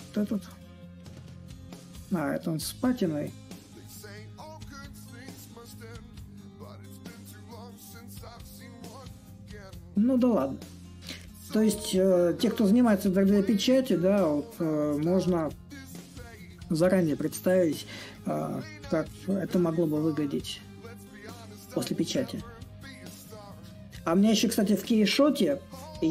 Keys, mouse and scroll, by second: 0.0-5.0 drag, 7.3-12.3 drag, 14.0-19.8 drag, 21.1-26.1 drag.